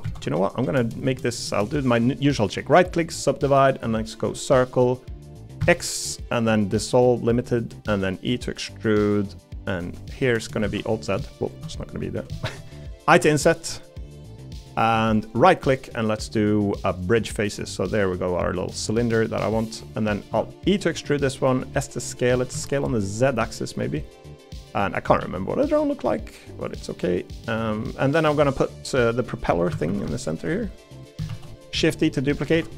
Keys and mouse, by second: 1.9-3.1 right drag, 4.8 middle click, 7.9 e, 10.2 middle click, 10.6 alt+z, 10.9 middle click, 11.7 middle click, 12.4 shift+middle click, 12.7 middle click, 13.2 i, 17.5 middle click, 18.0 middle click, 19.1-20.1 middle drag, 20.3 e, 21.5 s, 22.3 s, 25.2 e, 27.0 middle click, 27.8-29.3 middle drag, 29.7 a, 29.9 a, 30.6 middle click, 31.3 shift+d, 31.7 s, 32.5 f.